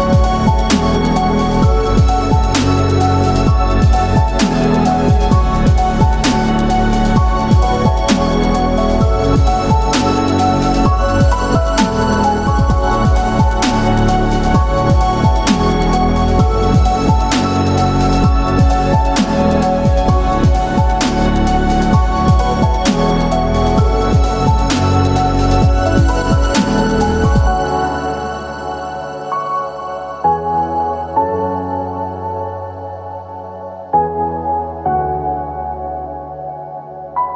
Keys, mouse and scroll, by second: 2.3 click, 3.2 s, 4.5 click, 5.6 e, 6.1 z, 8.4 click, 9.2 s, 11.6 click, 12.5 click, 13.9 s, 14.5 click, 15.3 e, 16.2 z, 17.3 click, 18.1 s, 19.4 click, 21.2 e, 21.6 z, 23.4 click, 24.4 s, 25.4 click, 26.6 click, 27.7 Tab, 28.2 click, 29.0-29.5 scroll down 1, 29.5-31.9 middle drag, 32.8 click, 33.1 Tab, 34.4 ctrl+r, 35.4 right click, 36.2 s.